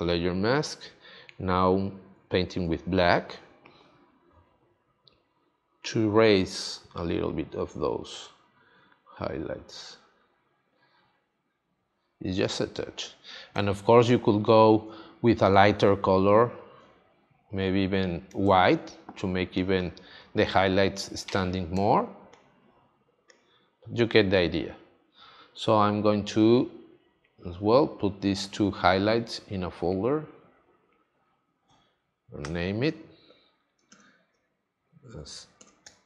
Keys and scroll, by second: 2.1 x, 14.0 space, 18.4 space, 21.7 space, 33.8 h, 35.0 BackSpace, 35.8 i.